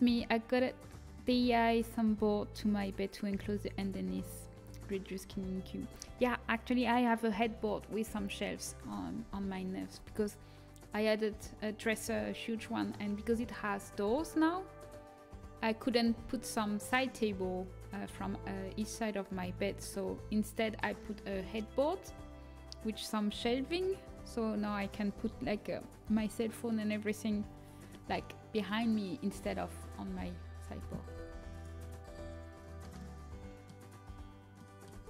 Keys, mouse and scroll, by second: 9.9 a, 31.1 a, 31.4-33.3 right drag, 33.3-34.4 middle drag, 34.8 a.